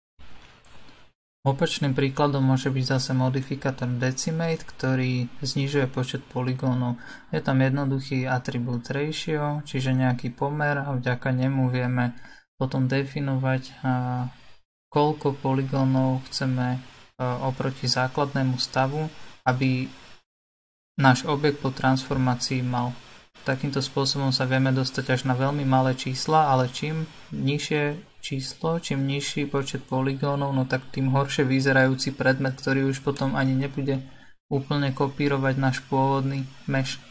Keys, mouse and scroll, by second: 0.6 click, 11.9 click, 16.2 BackSpace, 16.3 BackSpace, 23.5 click.